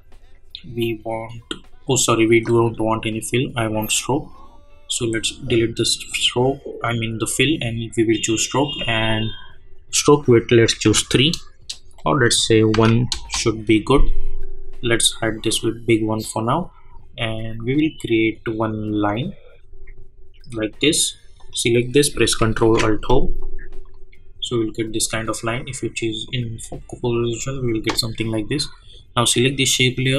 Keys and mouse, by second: 8.7 click, 11.9 click, 13.1 Return, 15.4 click, 17.9 click, 21.3 click, 22.6 ctrl+alt+Home, 23.8 click, 28.8-30.1 drag.